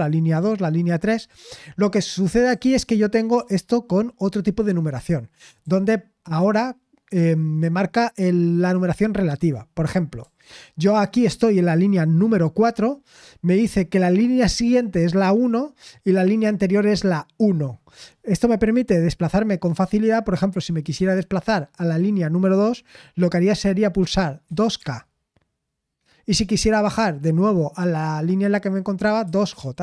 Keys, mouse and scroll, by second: 25.7-26.4 typing.